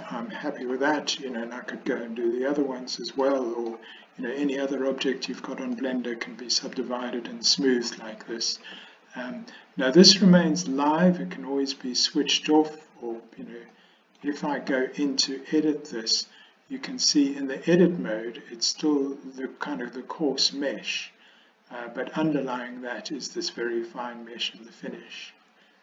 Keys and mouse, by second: 3.3 middle click, 5.8-6.8 drag, 6.8 middle click, 7.0 click, 13.8 middle click, 15.7 Tab, 25.6 Tab.